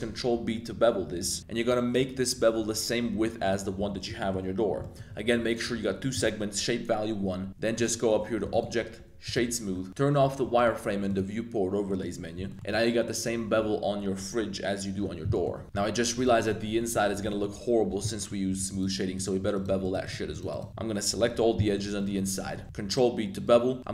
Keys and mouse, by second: 3.4 shift+click, 4.2 shift+click, 4.8 shift+click, 7.4 Tab, 7.7 click, 8.6 click, 9.9-11.6 drag, 11.8 middle click, 12.4 shift+middle click, 12.5 shift+g, 15.3 middle click, 15.6 z, 15.6 1, 15.7 middle click, 16.1 click, 16.3 shift+middle drag, 16.6 Tab, 16.7 middle click, 17.2 shift+middle click, 18.1 middle click, 18.3 2, 18.7 alt+click, 19.1 shift+click, 19.5 alt+shift+click, 19.8 shift+click, 20.0 shift+click, 20.3 shift+click, 20.5 shift+click, 20.7 shift+super+z, 21.2 shift+click, 21.6 shift+click, 21.9 shift+click, 22.4 middle click, 22.6 z, 23.4 super+b, 23.4 click.